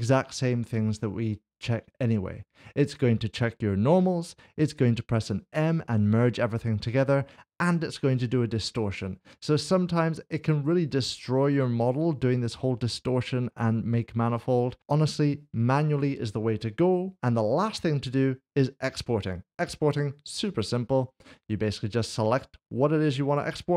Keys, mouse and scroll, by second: 18.1 middle click, 19.8 click.